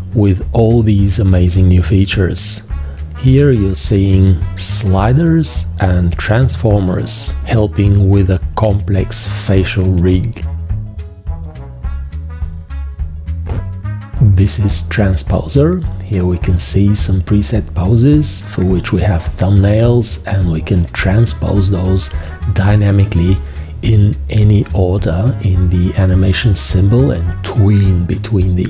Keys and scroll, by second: 3.4 shift+q, 3.8 g, 7.2-8.2 typing, 18.1 space.